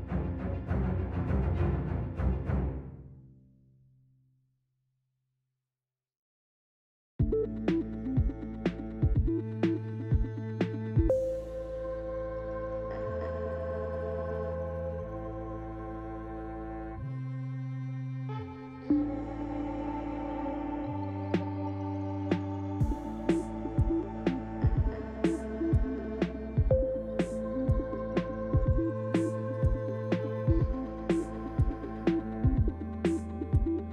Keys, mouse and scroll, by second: 0.4 middle click, 1.9 click, 3.6 click, 4.9 click, 6.3 click, 15.0 click, 15.5 click, 20.7 shift+middle click, 21.6 Tab, 23.4 click, 24.3 click, 25.1 click, 26.0 Tab, 29.1 click.